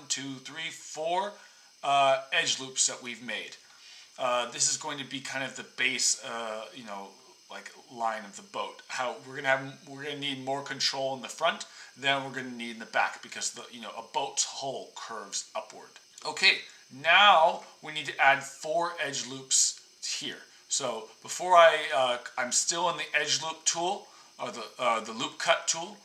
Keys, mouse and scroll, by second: 4.0 click.